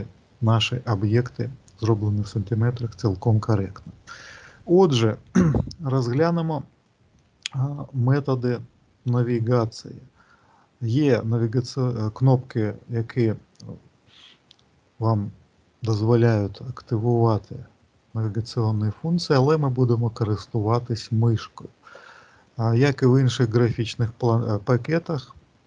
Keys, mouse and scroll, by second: 6.7 middle click.